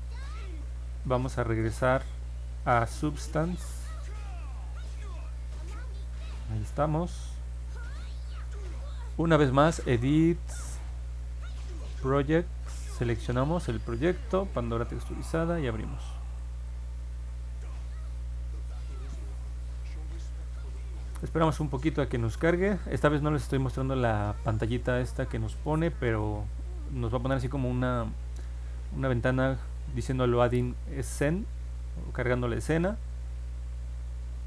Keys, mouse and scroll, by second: 2.9 click, 5.5 click, 5.9 click, 7.5 click, 9.4 click, 10.6 click, 12.8 click, 14.1 click, 15.0 click, 16.3 click, 22.8 click.